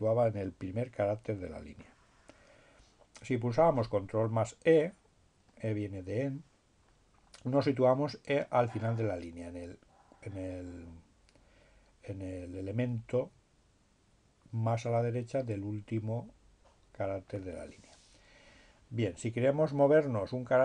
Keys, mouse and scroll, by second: 4.5-6.1 drag, 16.4-17.8 drag.